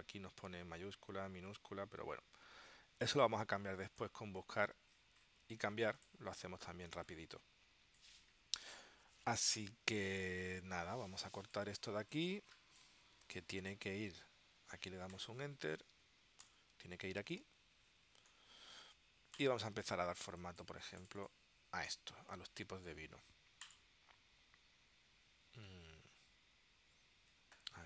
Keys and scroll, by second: 7.0 space, 13.6 super+x, 16.6 Return, 20.3 space.